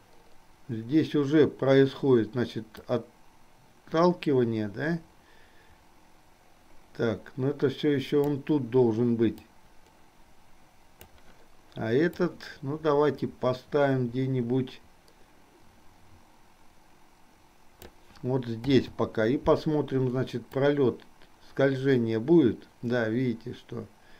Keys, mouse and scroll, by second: 3.0-8.6 drag, 9.7-11.4 drag, 12.5-18.2 drag, 20.6-24.1 drag.